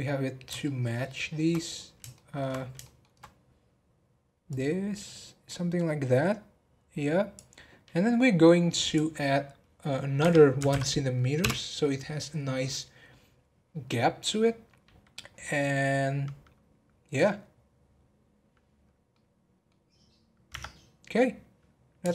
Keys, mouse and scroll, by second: 0.3 scroll down 2, 0.6-1.8 shift+middle drag, 1.8 scroll down 2, 2.1 shift+middle click, 2.6 scroll up 1, 2.8-4.5 shift+middle drag, 4.5 click, 8.8-11.9 drag, 17.9 scroll down 2, 18.8 scroll down 3, 19.1-20.5 middle drag, 20.5 Tab, 21.1-22.1 middle drag.